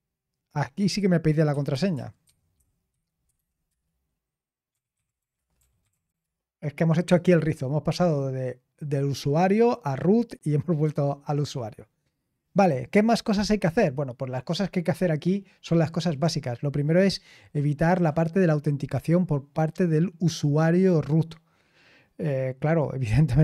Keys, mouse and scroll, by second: 1.2-6.5 typing, 15.2-17.2 scroll down 1, 17.2-20.7 scroll down 1, 20.7-23.4 scroll down 1.